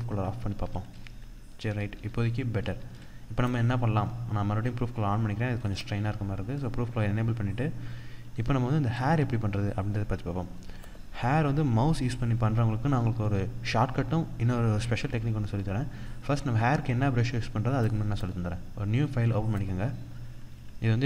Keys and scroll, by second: 1.1 ctrl+0, 1.4 ctrl+=, 2.4 ctrl+=, 7.7 ctrl+-, 11.6 ctrl+-.